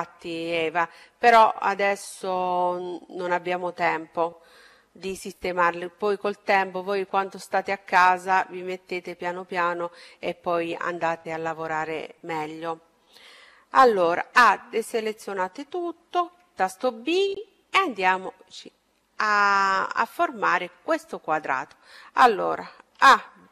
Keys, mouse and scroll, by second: 13.4-14.8 scroll up 1, 14.8-15.3 scroll up 1, 16.4 b, 22.9 a.